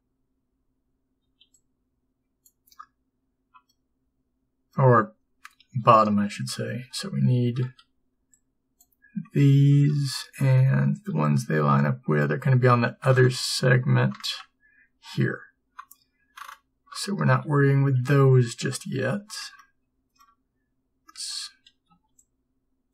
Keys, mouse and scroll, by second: 3.8 b, 6.9 a, 8.9 b, 12.3 b, 19.0 a.